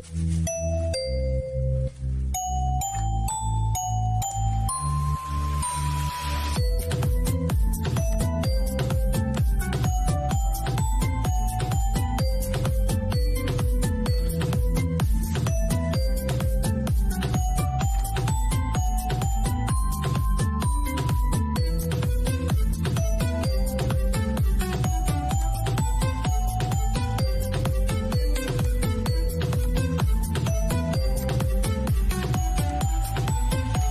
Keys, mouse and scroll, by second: 3.4 click, 7.4 click, 11.9 click, 14.0 y, 15.1 typing, 15.7 Return, 17.2 click, 21.0 click, 24.7 click.